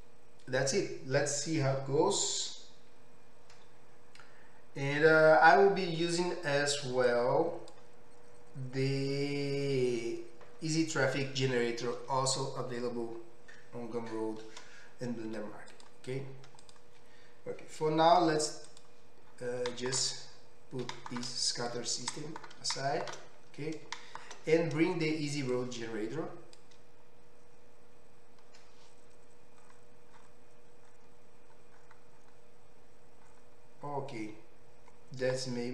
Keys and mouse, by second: 15.3 z, 16.8-18.7 middle drag, 18.7 click, 18.8-25.5 middle drag, 21.0 g, 25.5-27.6 drag, 27.6-35.7 middle drag.